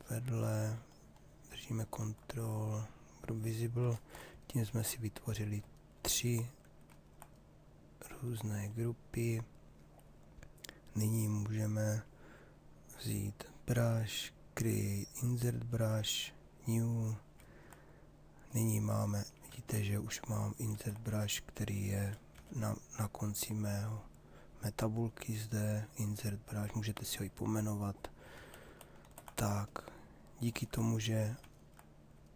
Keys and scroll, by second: 19.0 ctrl+z, 22.3 b, 27.9 ctrl+z.